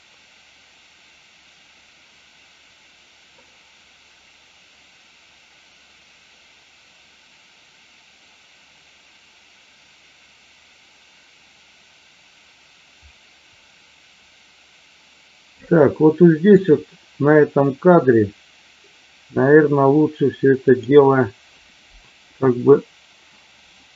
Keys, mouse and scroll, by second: 20.6 click.